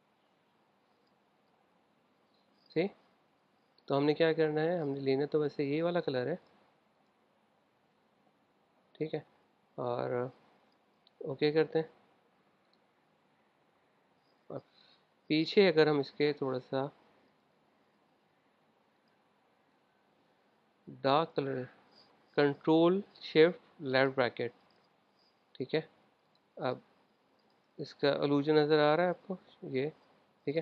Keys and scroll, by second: 24.2 shift+super+{.